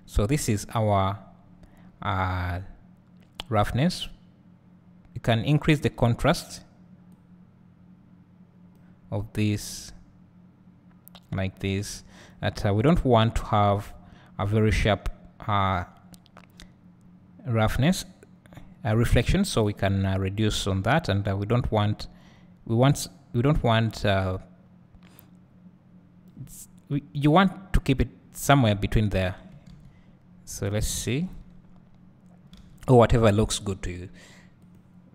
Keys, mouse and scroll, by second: 3.8-15.9 drag, 21.2 click, 31.3 ctrl+shift+click, 32.7 alt+a, 33.5 click.